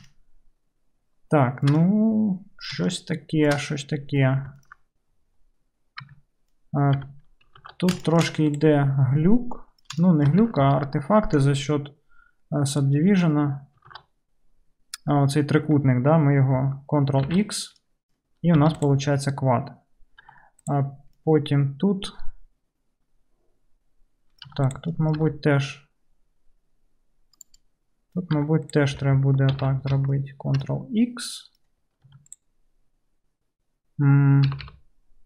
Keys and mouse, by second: 0.0 shift+middle click, 0.2 shift+click, 0.3 shift+middle click, 0.5-1.2 shift+middle drag, 1.2 shift+click, 1.4 shift+middle drag, 1.5 shift+click, 1.7 shift+middle click, 1.8 right drag, 2.1-2.7 middle drag, 2.7-4.9 shift+drag, 4.9 right click, 5.0-6.1 middle drag, 6.1 Tab, 6.6-16.3 drag, 7.1 2, 7.6 alt+z, 17.3 ctrl+x, 18.6 3, 20.3 2, 20.7 click, 20.8-27.5 right drag, 24.6 1, 24.7 click, 24.7 middle click, 25.3 g, 27.5-28.6 middle drag, 28.4 2, 28.6 click, 28.8-32.3 middle drag, 29.6 ctrl+x, 32.3 click, 32.4-35.2 middle drag, 34.5 g.